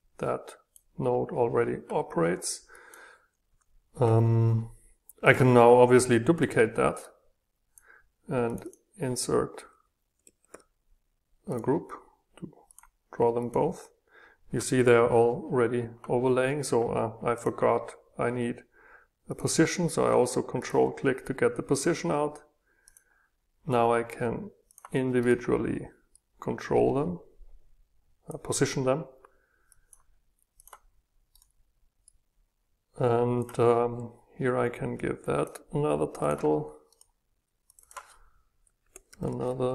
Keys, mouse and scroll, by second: 0.0 click, 2.4 click, 2.7 click, 3.4 Delete, 5.2-6.3 drag, 6.3 ctrl+d, 7.0-9.7 drag, 10.2 click, 11.5 click, 12.7-15.5 drag, 17.5-20.6 drag, 20.6-21.7 ctrl+middle drag, 21.7-25.2 drag, 25.2 middle click, 26.1 scroll down 2, 26.3-31.3 drag, 32.0-36.9 drag, 36.9 middle click, 37.7-39.7 drag.